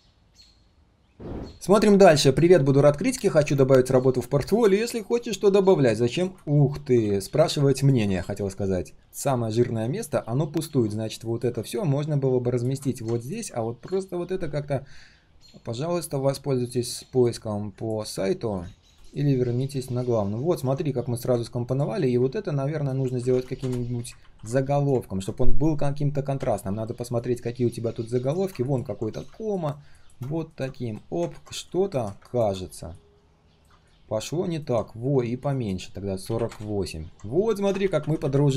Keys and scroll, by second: 24.2 ctrl+b, 29.1 ctrl+alt+c, 30.8 ctrl+alt+v.